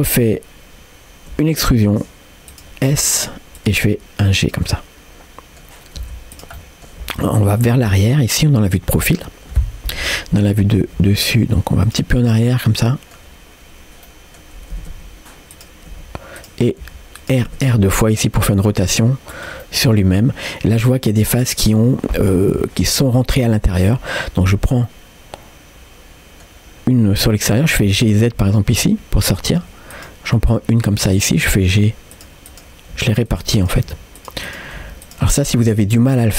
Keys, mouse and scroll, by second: 4.7 middle click, 6.0 s, 6.6 middle click, 7.0 g, 7.9-9.1 middle drag, 10.0 KP_7, 11.0 g, 12.5 middle click, 14.1 middle click, 14.8 r, 16.9 g, 19.6 middle click, 20.3-20.8 scroll up 1, 20.8 middle click, 21.5 middle click, 23.6 click, 24.4 click, 24.8-26.5 middle drag, 26.7-27.5 scroll up 2, 27.5 scroll down 2, 27.8 g, 29.9 click, 30.4 middle click, 31.5 g, 32.5 click, 33.0 g, 33.6 click, 33.9 g, 34.5 click, 34.8 g, 35.3 middle click, 36.1 middle click.